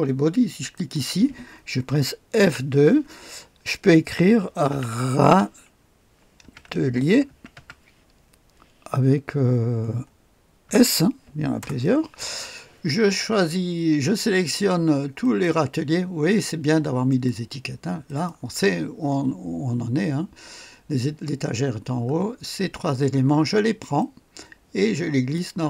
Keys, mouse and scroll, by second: 0.7 click, 2.4 F2, 4.7-8.0 typing, 10.6 s, 11.6 Return, 13.6-15.2 scroll up 1, 15.2 click, 17.1 ctrl+click, 18.1 ctrl+click, 18.7-19.5 scroll down 1, 19.7-21.5 scroll up 1, 21.5-23.1 scroll down 1, 24.0-25.6 drag.